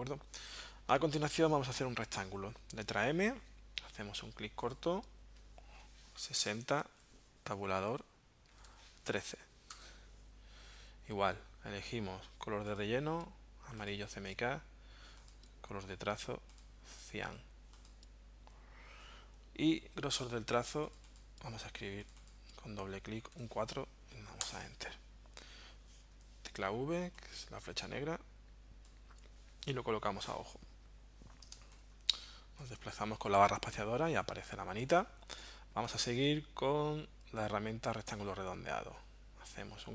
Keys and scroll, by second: 2.9 m, 6.0-6.8 typing, 8.3-9.2 typing, 9.7 Return, 23.3 4, 24.4 Return, 26.2 v, 31.6 space.